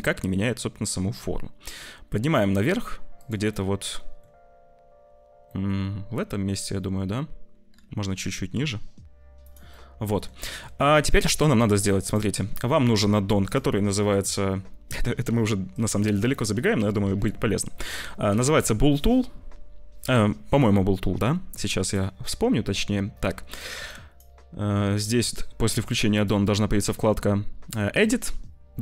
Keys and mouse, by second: 3.4 middle click, 5.5 middle click, 7.9 g, 9.7 middle click, 10.4 shift+middle click, 10.9 ctrl+s, 11.2 1, 11.5 click, 13.4 click, 23.8 click, 26.0 click.